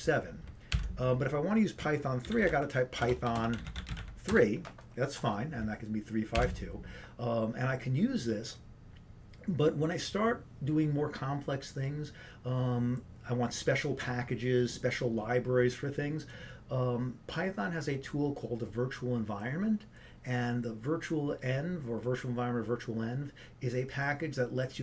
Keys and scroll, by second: 1.3 ctrl+d, 3.4-4.2 typing.